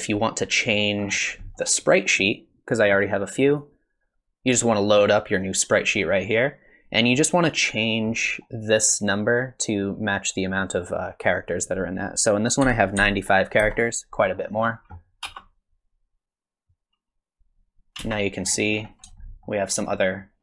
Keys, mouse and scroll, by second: 0.1 middle click, 1.0 scroll up 4, 1.4 middle click, 2.1 middle click, 3.5 click, 7.2 middle click, 10.1 click, 15.3 space, 18.1 space, 18.4-19.0 scroll up 6, 19.2 shift+middle click, 19.9 shift+middle click.